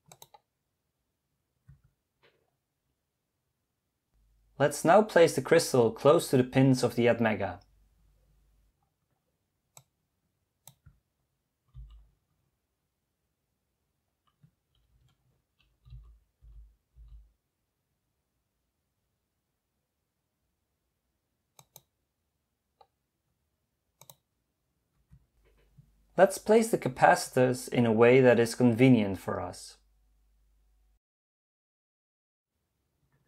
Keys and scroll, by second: 11.8 m, 14.2 typing, 15.9-17.0 typing.